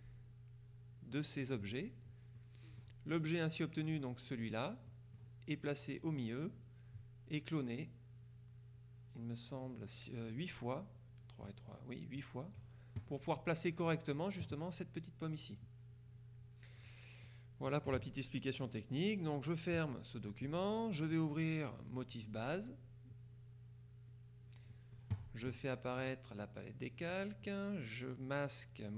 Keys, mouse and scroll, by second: 2.4 middle click, 4.0 click, 5.0 middle click, 14.0 middle click, 16.9 click, 17.4 middle click, 19.9 click, 20.7 click, 21.9 click, 24.8 click, 26.1 click, 27.1 click.